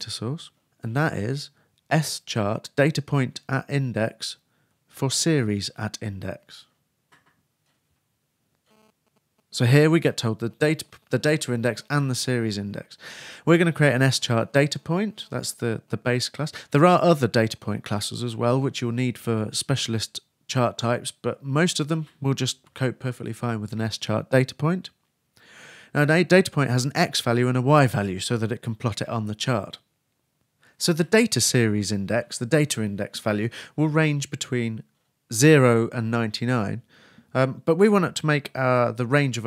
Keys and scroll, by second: 9.0 shift+Return, 9.1 shift+[, 9.3 shift+Return, 10.8-18.1 typing, 32.2-33.2 typing.